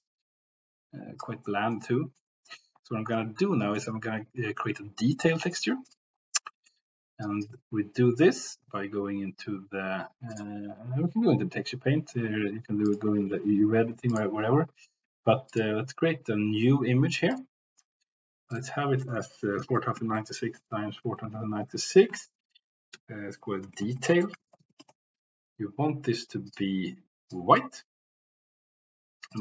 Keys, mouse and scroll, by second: 1.5 middle click, 1.9 middle click, 3.0-3.9 middle drag, 5.3 middle click, 6.5 middle click, 7.2 click, 8.0 click, 8.4 click, 10.3 click, 12.9 click, 14.1 click, 15.5-29.4 drag, 24.1 shift+BackSpace.